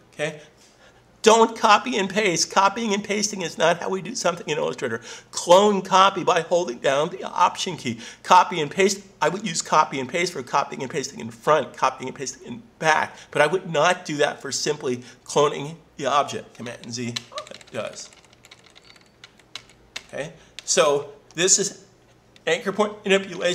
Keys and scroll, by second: 17.1 super+z.